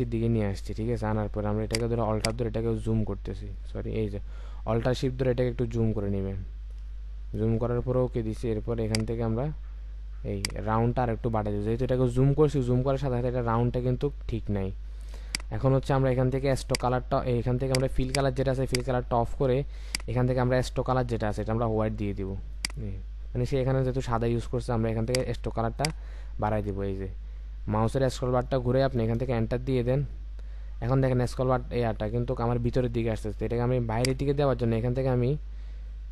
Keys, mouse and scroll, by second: 2.2 alt+click, 7.4 Return, 18.1 double click, 26.2-27.6 scroll up 1, 29.2 Return.